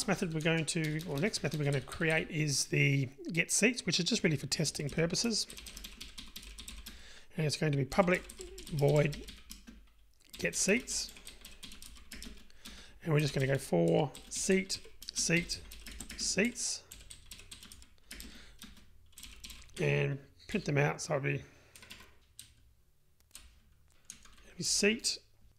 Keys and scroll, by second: 19.9 Tab, 22.1 Escape.